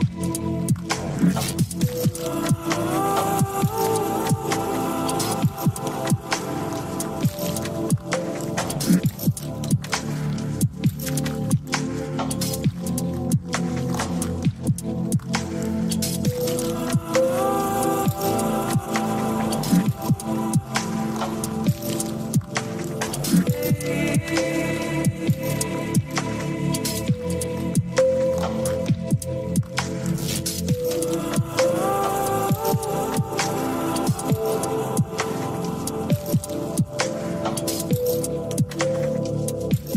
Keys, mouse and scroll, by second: 0.0 alt+click, 1.8 ctrl+click, 3.3 ctrl+click, 3.8 ctrl+click, 5.4 click, 12.9 ctrl+click, 14.7 ctrl+click, 17.3 ctrl+click, 18.8 shift+click, 21.1 KP_1, 23.5 click, 25.3-26.5 scroll down 2, 27.9 click, 32.9-35.4 scroll up 1, 35.4-36.1 scroll up 1.